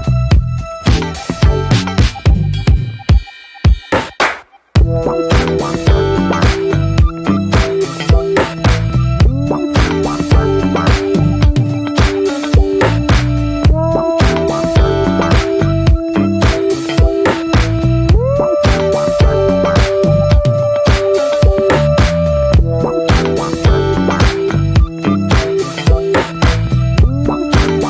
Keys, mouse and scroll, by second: 0.4-2.0 drag, 2.0 scroll down 2, 2.2 Tab, 2.5-3.4 middle drag, 3.4 Tab, 3.7 middle click, 3.8-4.2 scroll up 1, 4.2 3, 4.3 click, 4.9-5.5 alt+middle drag, 5.5 shift+d, 6.0 shift+middle click, 6.1 scroll up 1, 6.3 s, 7.3 shift+middle click, 7.5 scroll up 1, 7.7 e, 11.1-11.4 middle drag, 11.4 click, 11.7 l, 12.1-12.6 middle drag, 12.6 ctrl+b, 17.9 click, 18.1 click, 18.3 ctrl+a, 18.7 scroll down 3, 18.9 alt+middle drag, 19.5 ctrl+s, 19.6 drag, 19.7-20.0 scroll down 1, 20.0-20.8 middle drag, 20.8 Tab, 21.2-21.6 middle drag, 21.6 3, 21.8 click, 22.4-22.7 middle drag, 22.7 Tab, 22.8 click, 23.1 ctrl+s, 23.3-23.9 middle drag, 23.9 Tab, 24.2 middle click, 24.4 scroll up 1, 24.6 click, 24.7 Tab, 25.0 middle click, 25.1 scroll up 1, 25.3 click, 25.6 shift+middle click, 25.8-26.1 scroll up 2, 26.1-27.2 middle drag, 27.2 Tab, 27.4 click, 27.7 Tab.